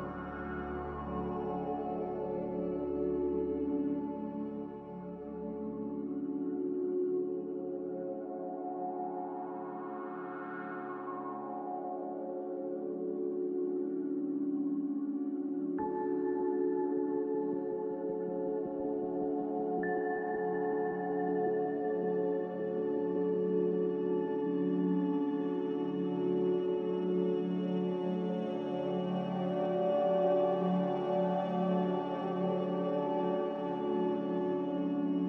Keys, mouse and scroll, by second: 22.1 ctrl+z, 22.8 ctrl+z, 28.9 z.